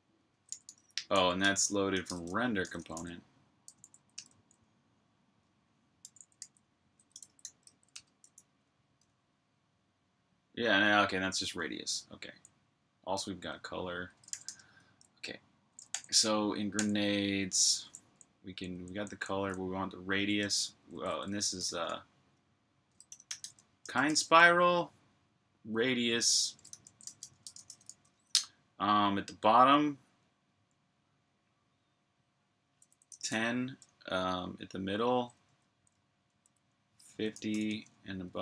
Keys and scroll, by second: 0.3-3.2 typing, 3.5 Tab, 3.7 Tab, 4.0 Tab, 4.0 Return, 5.6-8.2 typing, 11.7-12.2 typing, 14.1 g, 15.7 super+j, 17.9-18.3 typing, 20.0-24.5 typing, 26.0-27.7 typing, 32.5 typing, 36.6 typing, 38.1-38.4 typing.